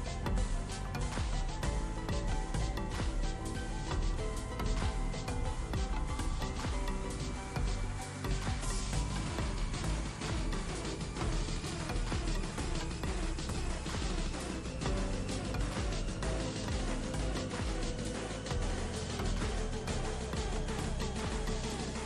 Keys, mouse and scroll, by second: 1.6-2.3 drag, 3.5 alt+click, 6.0 space, 6.1-7.7 ctrl+drag, 9.4-10.0 drag, 12.4 ctrl+space, 12.5-13.1 ctrl+click, 16.5 right click, 16.9 click, 18.8 right click, 19.8-21.2 drag.